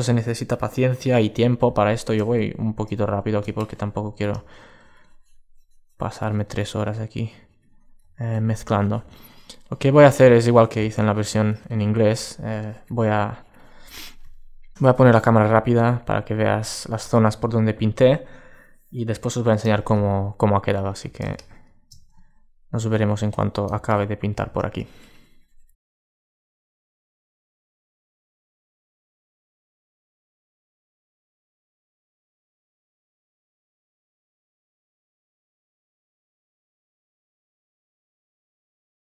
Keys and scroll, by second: 13.6 space, 19.6 super+space.